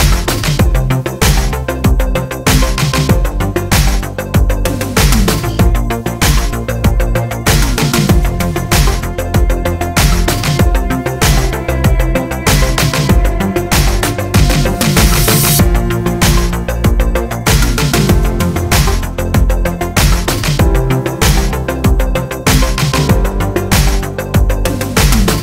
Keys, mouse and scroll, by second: 0.1 click, 0.4-2.8 middle drag, 0.8-1.1 scroll down 2, 1.1 s, 2.8 click, 4.0 s, 5.2 click, 5.8-12.6 middle drag, 7.7 ctrl+r, 10.9 a, 11.2-11.6 scroll up 1, 11.6 s, 12.6 click, 13.9 z, 14.3 scroll up 1, 14.8 click, 15.4 s, 19.3 click, 20.1 scroll down 1, 21.3 ctrl+r.